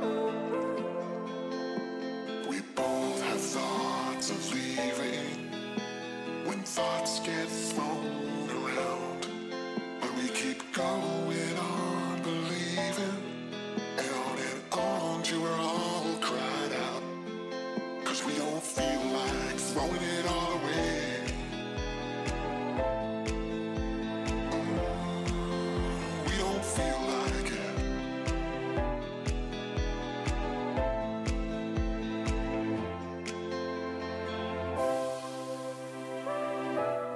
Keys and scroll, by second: 3.0 ctrl+z, 15.6 ctrl+z, 23.1 ctrl+z, 24.6 ctrl+-, 25.8 ctrl+=, 27.1 ctrl+0, 28.0 ctrl+=, 35.4 ctrl+z.